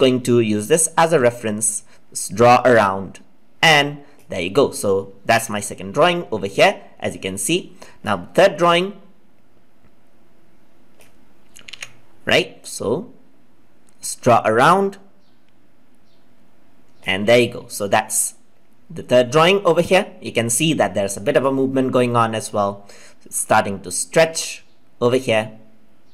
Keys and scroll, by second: 11.6 ctrl+z.